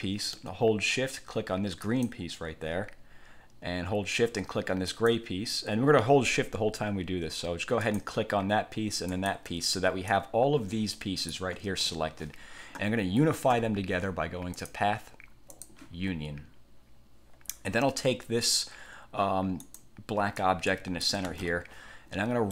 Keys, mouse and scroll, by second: 1.9 shift+click, 5.0 shift+click, 7.9 shift+click, 9.2 shift+click, 10.2-11.6 drag, 11.8 ctrl+z, 14.7 click, 15.6 click, 19.7 click, 20.5 click, 21.3 ctrl+z.